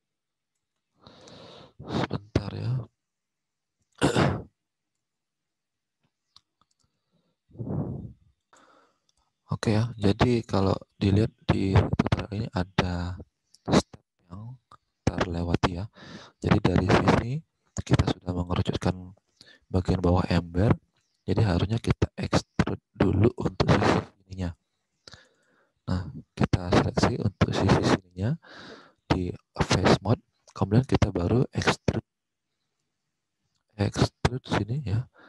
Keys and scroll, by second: 0.6 ctrl+z, 1.2 alt+Tab, 10.9 alt+Tab, 21.4 alt+Tab.